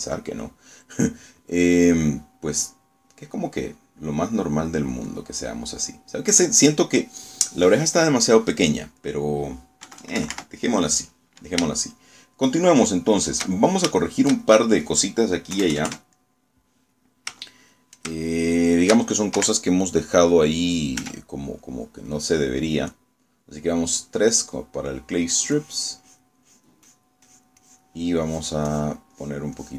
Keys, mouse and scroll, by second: 0.0 shift+click, 1.5-6.1 drag, 6.2-7.8 drag, 8.1 click, 9.0 click, 10.1 click, 11.0 KP_Subtract, 11.7 click, 12.8 shift+click, 14.6 shift+click, 15.1 shift+click, 15.2 shift+middle click, 16.6 KP_Add, 17.2 middle click, 18.5 shift+middle click, 19.4 shift+click, 20.4 shift+3, 22.1 f, 22.7 click, 24.0-26.0 middle drag, 26.6 click, 27.1 click, 27.6 click, 28.4 click, 29.4 click.